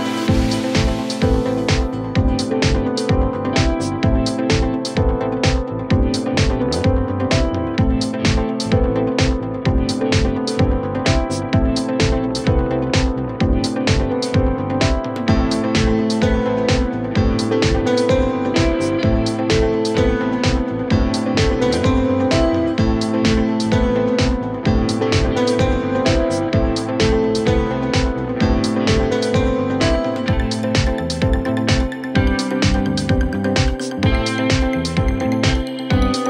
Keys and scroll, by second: 6.4 shift+F2, 6.8 Escape, 32.4 Escape.